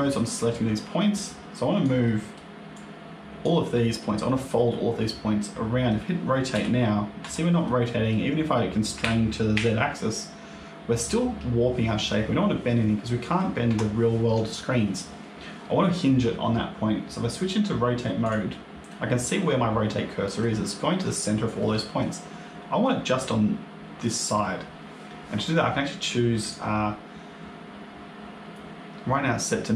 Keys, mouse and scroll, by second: 0.4 click, 1.9 middle click, 2.6 click, 3.6 middle click, 5.3 middle click, 6.4 r, 7.5 middle click, 8.9 r, 18.1 click, 18.8 middle click, 19.8 middle click, 21.5 middle click, 26.3 click.